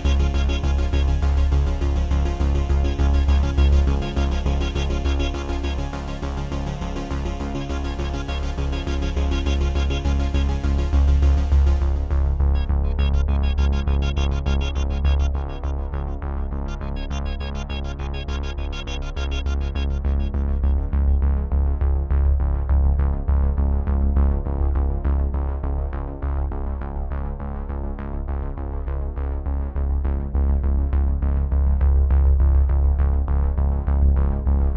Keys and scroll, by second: 13.0 z, 14.1 space, 16.1 v.